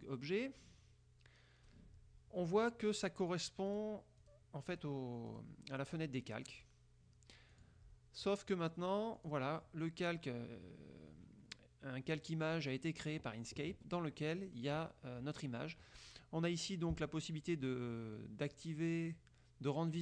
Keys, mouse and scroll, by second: 0.7-2.0 drag, 3.9 click, 4.3 click, 4.9 click, 5.5 click, 6.1 click, 6.7 click, 7.7 click, 9.3 click, 14.5 click, 14.9 click, 18.5 click.